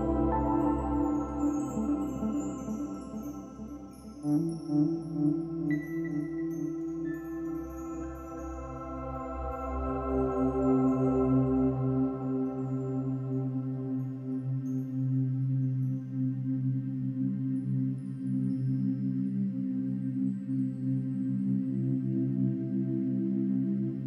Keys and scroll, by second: 0.7 ctrl+d, 6.5 ctrl+d, 7.6 ctrl+d, 9.8 ctrl+-, 10.2 ctrl+-, 10.8 space, 14.1 ctrl+alt+shift+n, 16.8 ctrl+-, 17.0 ctrl+=, 17.1 space, 19.8 space, 22.3 ctrl+d.